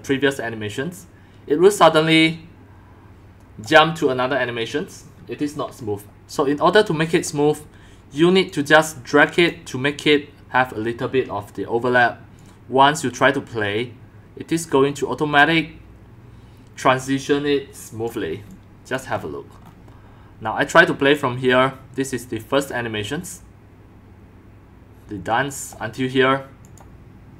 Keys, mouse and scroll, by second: 2.2-3.6 drag, 4.0-6.4 drag, 6.8 click, 8.5 click, 12.3-14.6 drag, 18.1 click, 18.4 x, 19.0 click, 19.2-19.8 scroll, 21.1 click, 23.1 scroll, 25.3 click, 26.6 click.